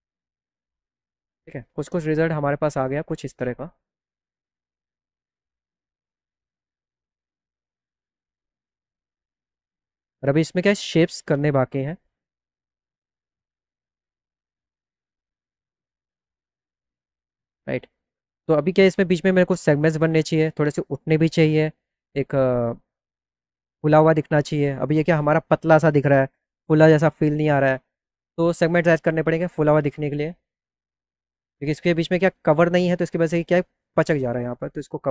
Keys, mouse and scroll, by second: 5.0 click, 5.5 click, 12.5 click, 16.9 click, 16.9 right click, 17.3 scroll down 1, 29.2 click, 33.3 click.